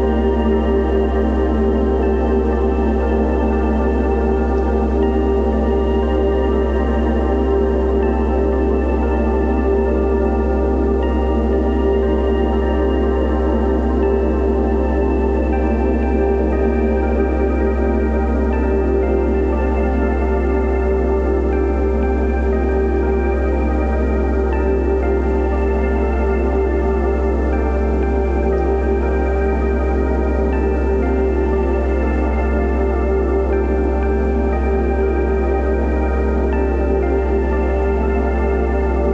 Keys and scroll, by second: 3.2 ctrl+t, 27.7 ctrl+v, 28.2 ctrl+a, 32.0 3, 32.4 Return, 33.9 BackSpace, 34.1 space.